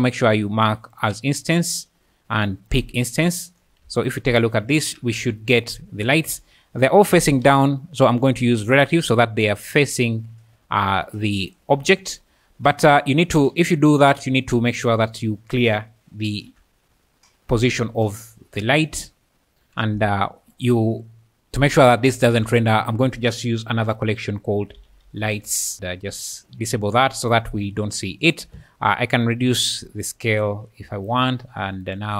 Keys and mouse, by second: 0.9 click, 2.7 click, 4.0 ctrl+shift+click, 5.2 alt+a, 6.3 space, 7.4 space, 8.6 click, 9.7 `, 10.6 `, 11.2 `, 12.0 `, 14.7 click, 16.2 alt+g, 16.9 `, 17.4 `, 17.5 `, 18.2 alt+g, 22.2 m, 24.7 l, 26.2 click, 27.3 click, 29.3-31.1 shift+drag, 31.9 shift+click.